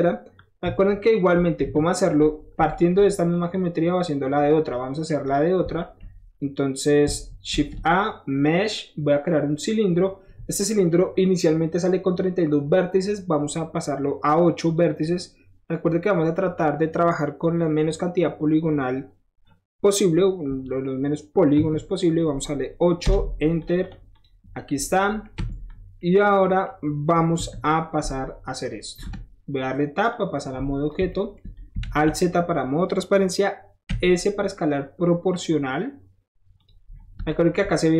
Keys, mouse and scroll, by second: 1.3 KP_1, 1.6 KP_3, 2.9-3.3 shift+middle drag, 3.3 shift+click, 4.1 shift+middle click, 4.5 shift+middle drag, 4.7-5.1 shift+middle drag, 5.3 click, 5.8 shift+middle drag, 7.5 shift+a, 9.6 click, 14.7 click, 15.9 click, 21.6 KP_8, 23.0 Return, 23.6 click, 24.2 click, 24.8-25.2 middle drag, 25.4 Tab, 25.7 middle click, 26.0 middle click, 27.4 KP_1, 29.0 Tab, 30.1-30.9 drag, 31.1 shift+middle drag, 31.8 alt+shift+z, 33.9 s, 36.6 click, 36.9 middle click, 37.3 shift+middle drag.